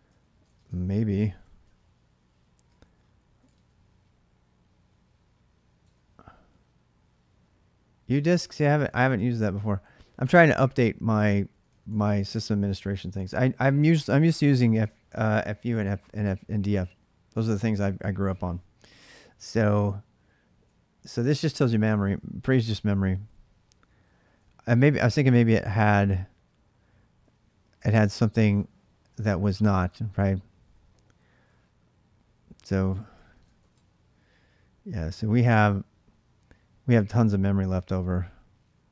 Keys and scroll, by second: 0.0-3.3 typing, 5.6 Return, 8.5-9.7 typing, 11.1 k, 11.3 k, 18.6-21.9 typing, 25.1 k, 25.4 k, 27.1 j, 27.3 j, 31.9-33.9 typing.